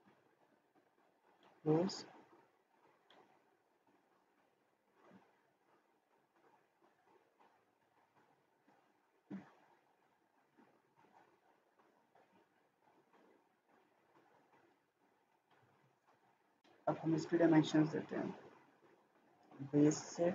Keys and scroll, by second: 12.2 Escape, 16.2 Escape.